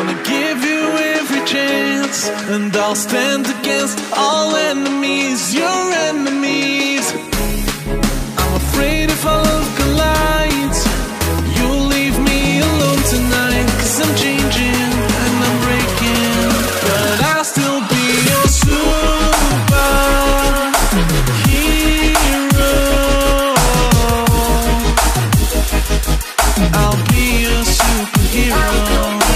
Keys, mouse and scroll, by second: 0.0-1.3 typing, 1.4 click, 2.9 click, 6.4 alt+Tab, 6.7 alt+click, 7.2 ctrl+c, 7.4 Tab, 7.6 v, 8.2 click, 8.6 alt+scroll down 1, 9.3 alt+scroll up 1, 9.8 click, 10.4 Delete, 10.6 click, 11.2 alt+Tab, 11.6 click, 11.8 Tab, 12.2 v, 12.6 click, 12.8 Left, 13.4 click, 13.7 Return, 14.1 click, 14.2 BackSpace, 14.6 click, 16.2 KP_Add, 16.4-18.2 typing, 17.6 KP_Add, 19.0 click, 19.4 t, 20.2 click, 20.4 Return, 20.6 scroll up 1, 20.9 alt+scroll down 1, 21.1-21.5 ctrl+scroll up 2, 21.8 click, 22.3 alt+Tab, 23.0 Tab, 23.1-25.1 typing, 25.2 click, 25.6 Left, 26.8 alt+Tab, 27.4 click, 28.2 v, 28.6 click.